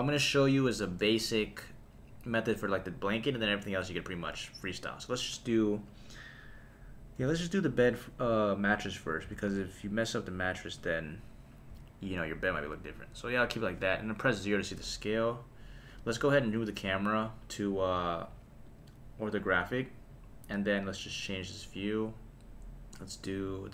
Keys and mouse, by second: 7.2 s, 8.8 click, 9.2 s, 9.5 z, 10.9 click, 11.7 s, 12.3 click, 14.2 KP_0, 15.9 click, 17.8 click, 18.6-19.5 drag, 20.7-22.6 drag.